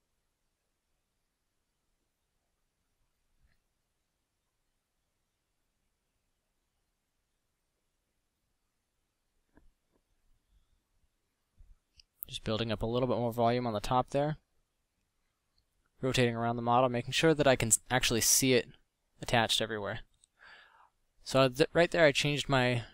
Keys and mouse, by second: 0.9 f, 1.8 click, 10.7 f, 18.1 a, 22.2 right drag, 22.6 a.